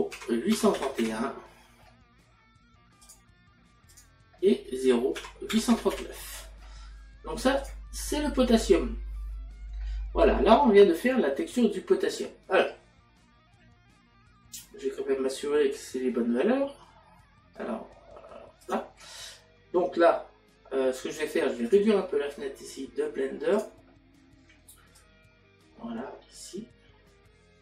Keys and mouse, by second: 0.1 KP_Decimal, 3.0 click, 5.2 KP_Decimal, 18.7 click, 21.7 click, 23.5 click, 25.9 click.